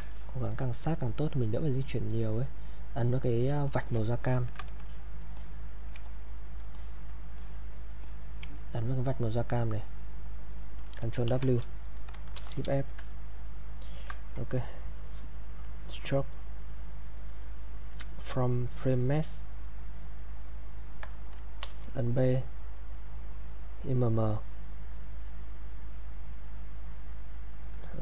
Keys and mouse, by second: 0.1 ctrl+alt+click, 3.5 ctrl+alt+click, 3.7 alt+click, 4.1 ctrl+right click, 4.9 alt+click, 6.2 alt+right click, 6.7 alt+click, 9.7 click, 11.3 ctrl+w, 12.3 shift+f, 15.3 click, 19.2 click, 21.6 b, 23.4 click, 27.7 click.